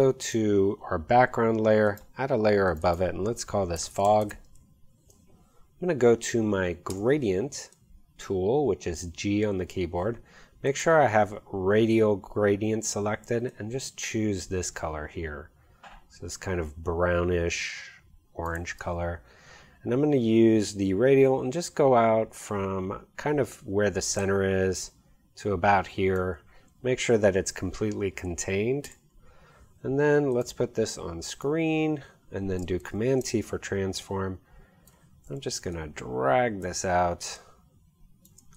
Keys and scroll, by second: 3.6-4.6 typing, 6.9 g, 28.9 v, 33.0 super+t.